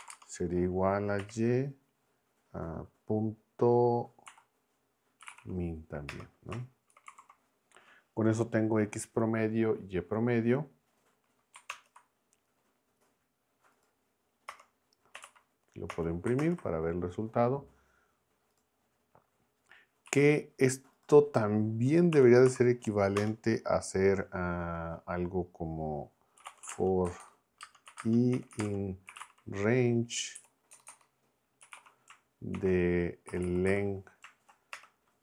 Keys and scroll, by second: 0.0-0.1 typing, 1.2 y, 4.3 ., 5.2 m, 6.1 Return, 6.7-7.6 typing, 11.7 ctrl+Return, 14.5 Return, 14.9-15.7 typing, 15.9 Return, 20.0 Right, 22.1 Escape, 22.5 shift+b, 23.2 Return, 26.1-34.1 typing, 34.7 Return.